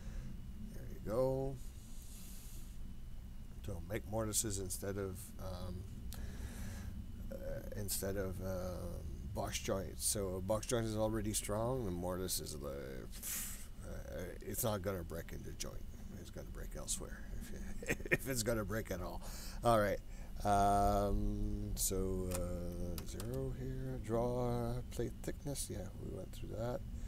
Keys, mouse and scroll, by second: 2.1-3.2 scroll up 4, 3.7-4.3 scroll down 3, 4.3-6.3 scroll up 1, 7.9-8.3 scroll up 1, 21.5-23.9 drag.